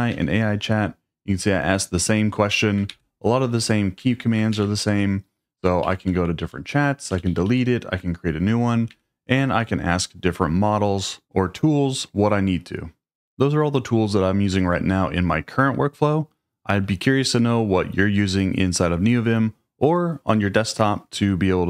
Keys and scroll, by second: 0.1 Return, 2.9 super+p, 4.0 Escape, 4.5 super+k, 5.8 Down, 6.0 Down, 6.2 Down, 6.4 Down, 7.1 Up, 8.9 Escape.